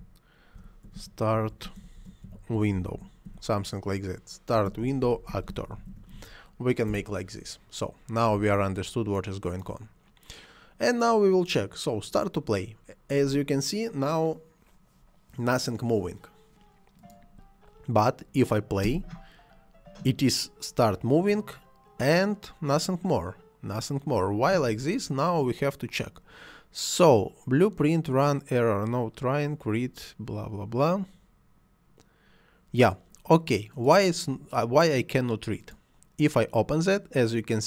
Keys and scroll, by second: 0.5-3.3 typing, 4.6-5.9 typing, 6.9 Return, 18.8 space, 24.5 Escape.